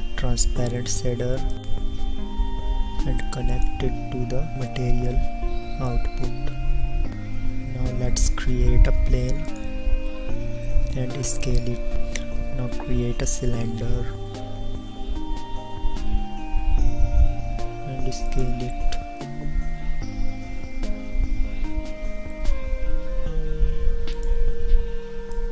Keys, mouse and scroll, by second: 0.3 shift+a, 12.6 s, 13.2 shift+a, 16.8 s, 20.4 KP_1, 22.7 s.